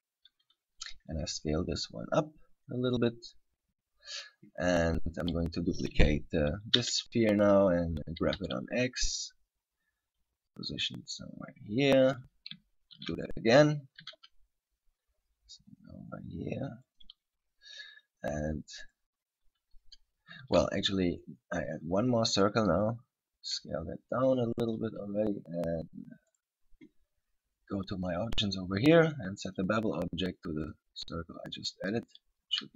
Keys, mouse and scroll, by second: 0.7 s, 3.2 click, 3.7-4.8 scroll down 1, 5.4 right click, 7.7 shift+d, 12.3 click, 13.2 shift+d, 17.2 click, 19.1 right click, 20.6 shift+a, 23.8 s, 24.9 click, 26.5 right click, 27.9 click, 29.7 click, 32.3 right click.